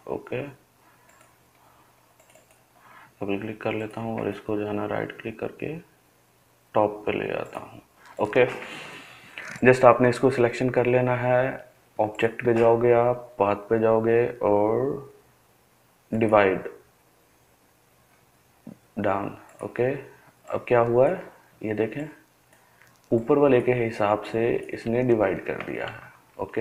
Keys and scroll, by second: 25.9 ctrl+z, 26.4 ctrl+z.